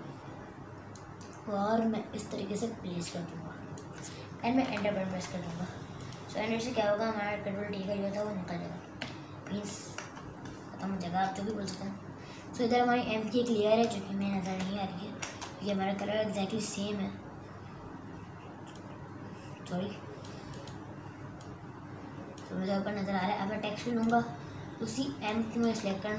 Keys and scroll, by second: 4.8 Return, 9.1 ctrl+KP_Add, 9.8 ctrl+KP_Add, 14.6 ctrl+KP_Add.